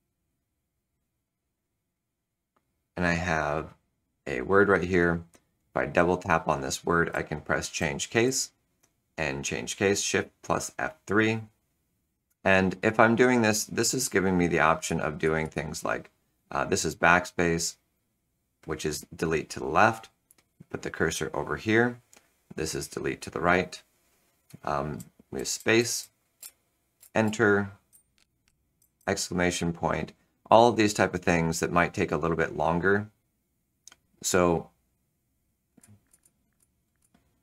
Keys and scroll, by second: 7.0 shift+F3, 7.7 shift+F3, 8.2 shift+F3, 13.9-16.3 typing, 17.0 Delete, 17.3 Delete, 22.3 Delete, 22.5 Delete, 22.9 Delete, 24.9 space, 25.3 space, 25.7 space, 25.9 space, 26.3 Return, 26.9 Return, 27.2 Return, 27.6-28.9 typing, 35.7-37.0 typing.